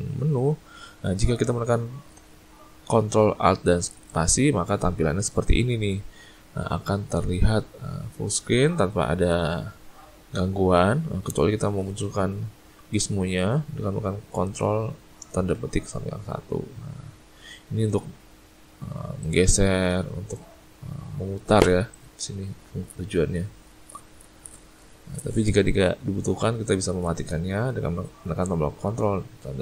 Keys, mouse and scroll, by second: 15.4 ctrl+`, 19.3 click.